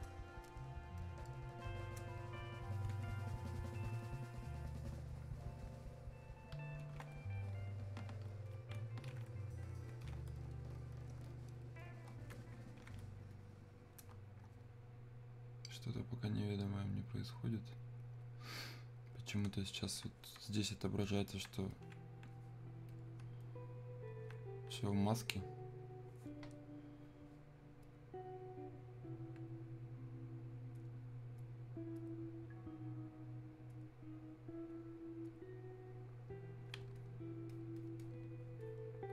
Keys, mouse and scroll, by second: 9.7-15.8 drag, 20.0-26.7 ctrl+drag, 27.9 click, 31.6 click.